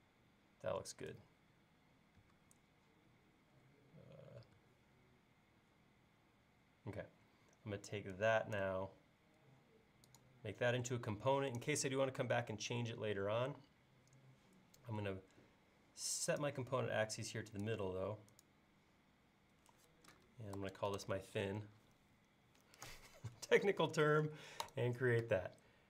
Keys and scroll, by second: 2.4 q, 20.4-21.5 typing.